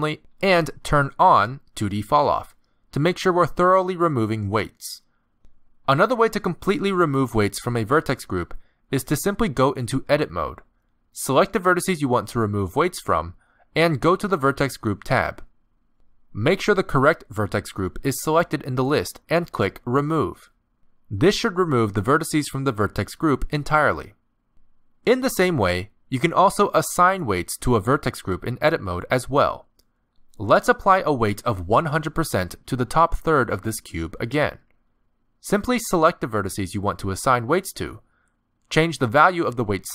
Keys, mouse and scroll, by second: 0.1 click, 2.0 click, 5.2 z, 8.7 click, 8.8 z, 9.9 Tab, 11.3 middle click, 12.6 middle click, 13.4 alt+a, 14.1 b, 15.2 middle click, 16.3 a, 16.9 middle click, 21.1 click, 23.5 Tab, 24.0 middle click, 27.9 Tab, 29.0 middle click, 29.6 z, 31.0 alt+a, 31.4 b, 32.8 middle click, 34.9 middle click, 38.6 middle click.